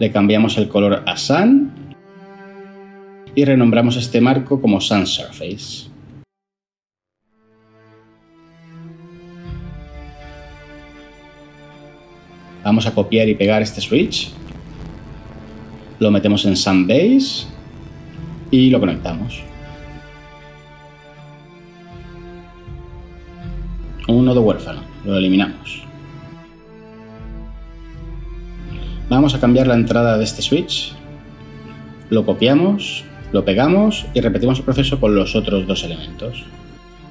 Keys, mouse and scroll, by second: 3.3 F2, 3.8-4.6 typing, 4.7 Return, 14.5 ctrl+c, 15.2 ctrl+v, 26.3 Delete, 32.8 ctrl+c, 33.4 ctrl+v.